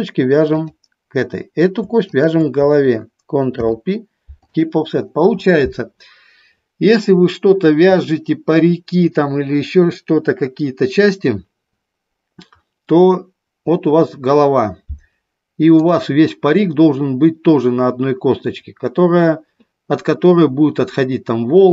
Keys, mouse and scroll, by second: 2.2 shift+click, 3.7 ctrl+p, 16.0 click.